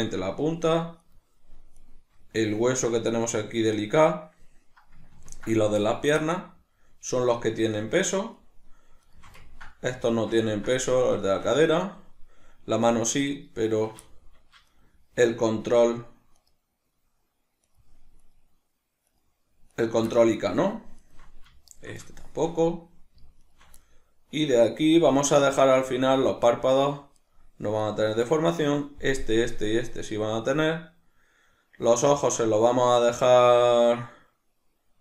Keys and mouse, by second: 1.0 shift+right drag, 1.8 shift+right click, 5.2-7.7 ctrl+middle drag, 7.7 shift+right click, 8.3 shift+right drag, 9.1 shift+right click, 9.4-13.4 ctrl+middle drag, 13.4 shift+right click, 14.1 shift+middle click, 14.7 shift+right click, 16.4 shift+right click, 17.7 shift+right drag, 18.2 shift+right click, 19.1 shift+right click, 19.8 shift+right click, 20.2-21.0 middle drag, 21.0 shift+right drag, 21.7 shift+right drag, 22.1-23.4 shift+middle drag, 23.4 shift+right drag, 23.8-27.2 middle drag, 27.2 shift+right drag, 27.8 shift+right drag, 28.4 middle click.